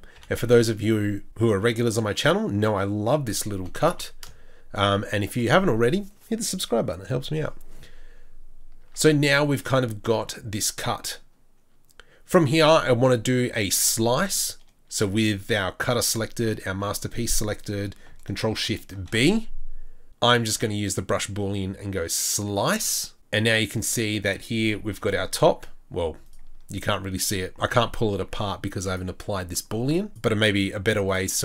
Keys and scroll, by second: 0.1 ctrl+b, 0.9 3, 3.6 g, 8.8 Tab, 24.9 g.